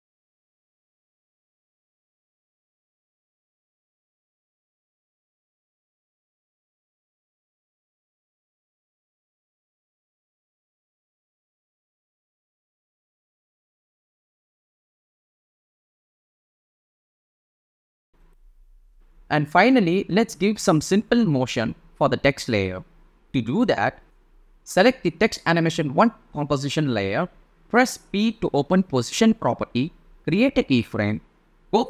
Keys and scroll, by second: 27.6 p.